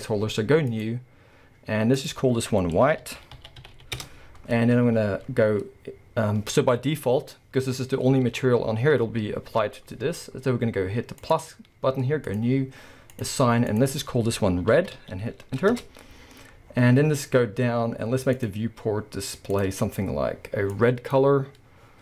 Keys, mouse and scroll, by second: 0.7 click, 1.9-11.6 drag, 4.0 Return, 6.8-7.2 scroll down 2, 7.2-9.2 scroll up 1, 12.3-13.3 drag, 13.7-18.5 drag, 15.8 Return, 16.7-18.3 scroll down 1, 19.0-19.5 scroll down 1, 19.5 click.